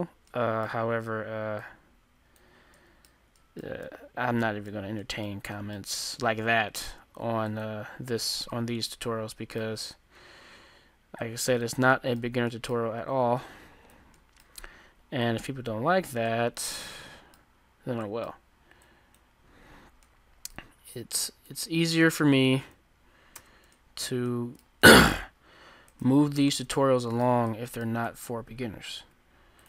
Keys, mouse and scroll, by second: 0.5-5.2 middle drag, 1.7-3.5 drag, 3.8 ctrl+z, 7.5-9.3 drag, 8.3-9.5 middle drag, 10.1-12.0 middle drag, 11.3-13.2 drag, 12.0 right click, 12.8-18.7 middle drag, 13.4-17.1 drag, 18.9-20.7 drag, 21.3-23.1 drag, 21.3-23.9 middle drag, 22.4 ctrl+z, 23.4 Tab, 26.0-28.2 right drag, 26.8-29.5 middle drag, 29.0 g.